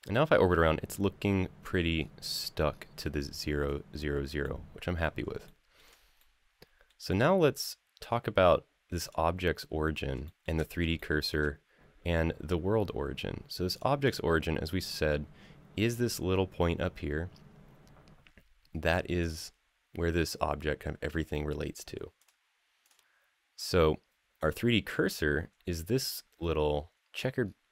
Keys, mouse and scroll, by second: 1.7-2.5 scroll down 4, 2.5-2.9 scroll up 3, 4.2-4.7 middle drag, 5.2-5.5 shift+middle drag, 6.0-6.6 middle drag, 6.9-7.5 middle drag, 7.8 scroll down 2, 8.2-8.8 scroll up 2, 8.8 click, 10.0 shift+middle click, 10.7-11.1 shift+middle drag, 13.5 click, 13.8 click, 19.0 click, 22.0 click, 22.6 click, 26.9 click, 26.9-27.7 scroll up 8.